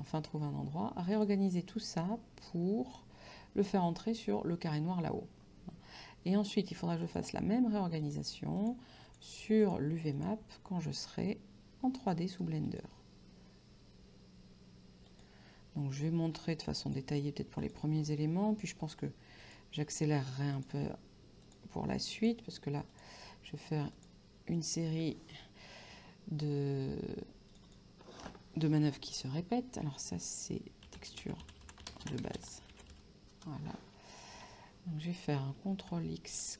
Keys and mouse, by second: 1.2 click, 7.1 click, 12.7 click, 15.1 click, 16.9 click, 19.5 click, 20.6 click, 24.0 click, 27.6 click, 31.0-33.7 typing, 35.9 ctrl+x.